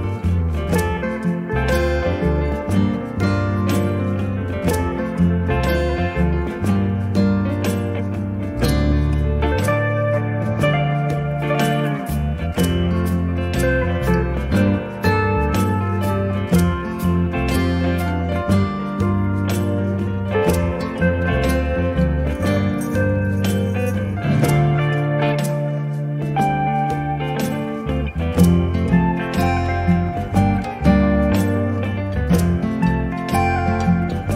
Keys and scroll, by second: 3.5 1, 18.0 space, 32.8 b.